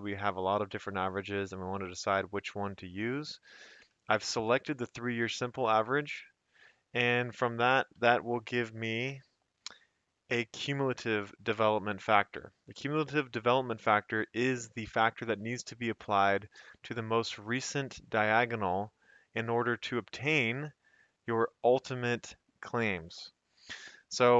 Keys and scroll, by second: 0.3 F2, 1.5 Escape, 3.9 F2, 5.2 Escape, 5.8 F2, 6.2 Escape, 7.9 F2, 10.3 Escape.